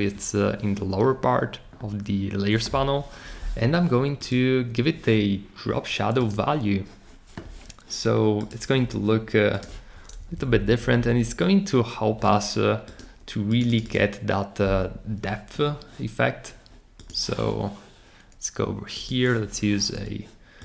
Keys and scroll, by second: 10.2 Up, 10.3 Up, 10.5 Up, 10.7 Up, 10.9 Up.